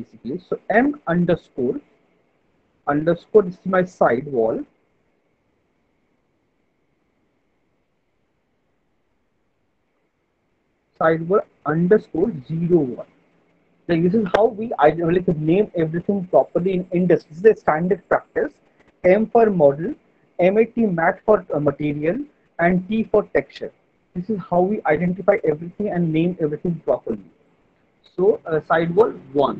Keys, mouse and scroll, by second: 4.1-5.7 typing, 8.5-9.2 typing.